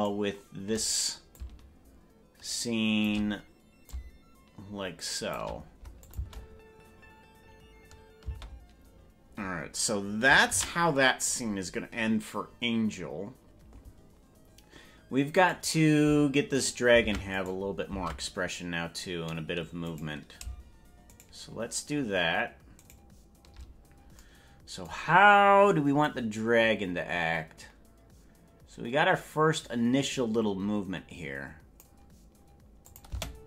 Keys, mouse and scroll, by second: 0.1 shift+right click, 1.3-3.1 shift+drag, 3.8-5.4 shift+drag, 6.0-8.1 drag, 6.3 space, 8.5 space, 13.9 ctrl+s, 15.5 right click, 16.7 right click, 17.1 ctrl+Tab, 17.5 right click, 18.1 ctrl+Tab, 20.3 right click, 21.5 shift+right click, 23.1 right click, 26.1-31.9 drag, 32.9 click, 33.1 space.